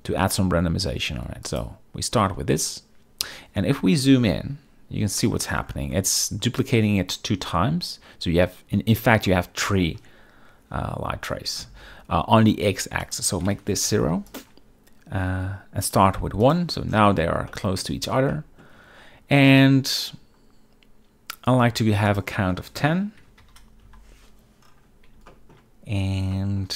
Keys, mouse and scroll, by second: 5.3-5.6 shift+middle drag, 13.1-14.4 drag, 15.9 click, 17.6-17.9 shift+middle drag, 18.4 shift+middle drag, 22.2-24.0 drag, 25.4 shift+middle drag, 26.5 shift+middle drag.